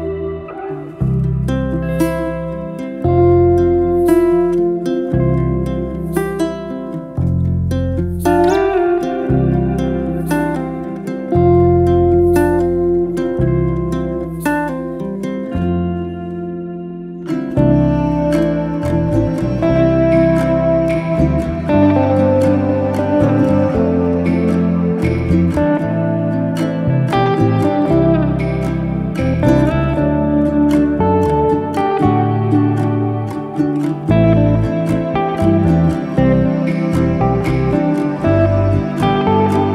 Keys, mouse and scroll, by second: 0.5 scroll up 1, 0.9-2.6 middle drag, 2.6 scroll down 3, 2.8-4.3 middle drag, 5.6-6.8 middle drag, 6.8 click, 7.4 shift+s, 8.4-9.8 middle drag, 9.8 KP_Divide, 10.1 Tab, 10.4-10.7 scroll down 3, 10.7 middle drag, 11.0 click, 11.5 3, 11.6 click, 12.0 shift+s, 13.8 Tab, 14.2-14.8 middle drag, 14.8 KP_Divide, 15.4-16.0 scroll up 2, 16.0-17.2 shift+middle drag, 17.2 drag, 17.5 shift+click, 17.8 middle click, 18.3-19.1 scroll down 1, 19.1 alt+d, 20.9 ctrl+z, 21.5-22.8 drag, 22.8 alt+d, 26.2 z, 26.4-26.9 middle drag, 26.9 scroll down 1, 27.2-28.6 middle drag, 28.8 alt+d, 30.7 z, 30.8 z, 31.0-32.4 middle drag, 32.8-33.5 middle drag, 33.5 scroll up 2, 33.7-34.7 middle drag, 34.7 click, 36.1 alt+d, 38.4 z.